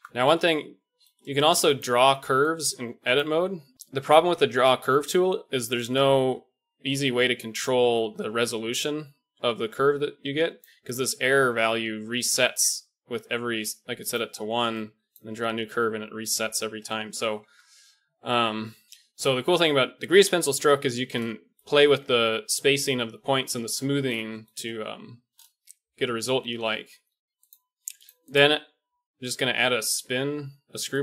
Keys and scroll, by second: 17.4 Tab, 18.3 Tab, 27.3 Tab.